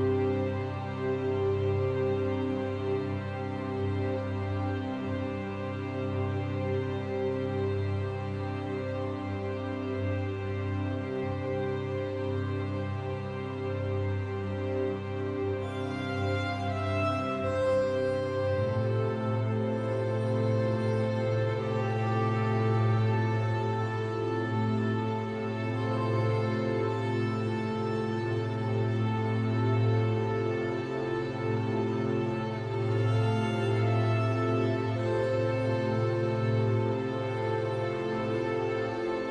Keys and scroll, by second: 7.4 ctrl+0, 17.1 ctrl+t.